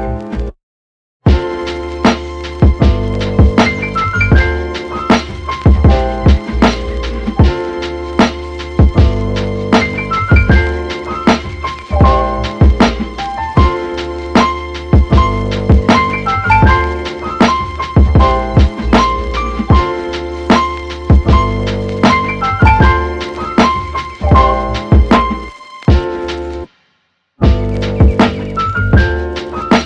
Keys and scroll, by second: 13.1 super+z.